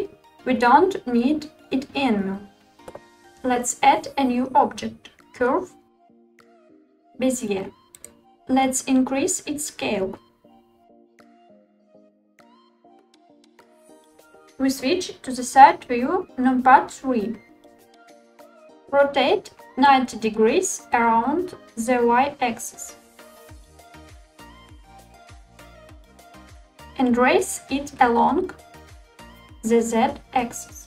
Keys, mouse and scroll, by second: 0.2 Delete, 3.2 shift+a, 10.0 s, 12.4 click, 17.0 KP_3, 18.8 r, 23.6 y, 24.0 9, 24.2 0, 25.0 click, 28.1 g, 29.1 z.